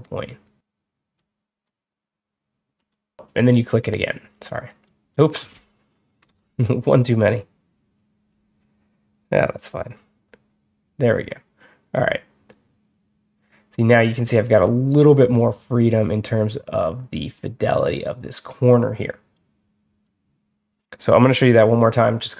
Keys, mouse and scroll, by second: 1.0-1.5 drag, 2.6 click, 4.2-4.7 drag, 6.2 ctrl+z, 10.2 ctrl+z, 11.9-15.2 drag, 15.9-17.2 drag, 18.2 click, 19.9 click.